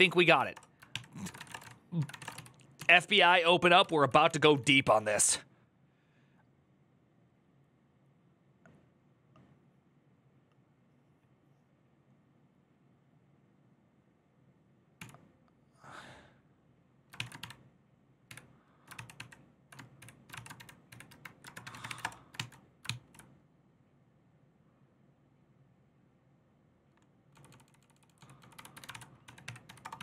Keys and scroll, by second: 0.0-1.9 typing, 0.7 ctrl+n, 2.0 Return, 2.1 ctrl+u, 2.6 ctrl+u, 3.8-5.1 typing, 16.7-18.1 typing, 18.7 ctrl+c, 18.9 ctrl+n, 19.7-22.6 typing, 27.5-30.0 typing.